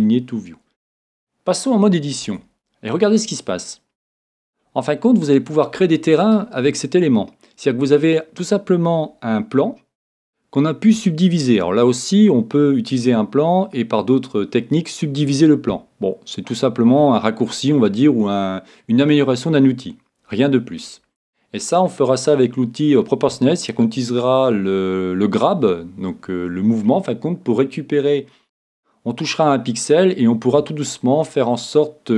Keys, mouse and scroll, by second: 2.3 Tab, 3.3-5.1 middle drag.